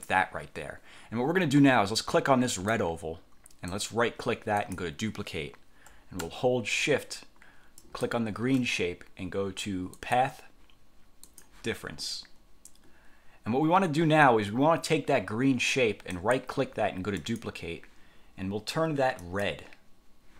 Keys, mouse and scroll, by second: 2.7 click, 3.8 click, 4.7 click, 7.9 shift+click, 10.1 click, 11.4 click, 16.3 click, 17.3 click, 19.3 click.